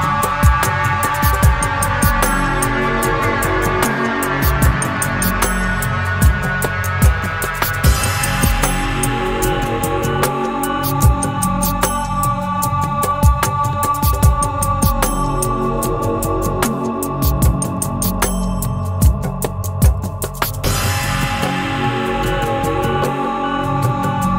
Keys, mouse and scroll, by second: 1.5 click, 2.1 -, 3.1 click, 4.1 click, 5.4 click, 6.0 middle click, 8.9 click, 9.2 right click, 10.2 click, 11.0-12.2 drag, 12.3 click, 13.5-15.2 drag, 15.7-16.9 drag, 17.8 click, 19.1 middle click, 19.8 middle click, 20.4 middle click, 21.4-23.6 drag.